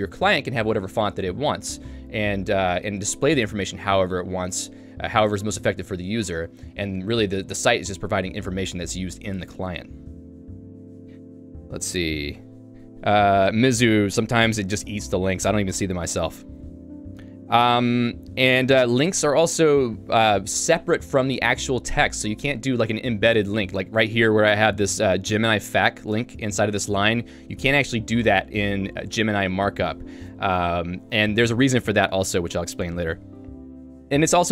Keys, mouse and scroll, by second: 24.4 k, 26.2 shift+v, 30.2 Escape, 30.8 j.